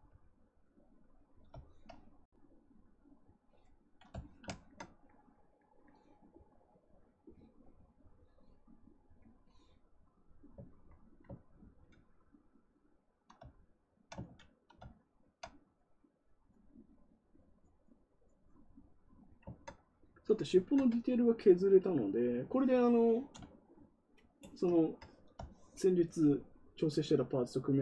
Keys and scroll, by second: 11.5 ctrl+z, 14.2 ctrl+z.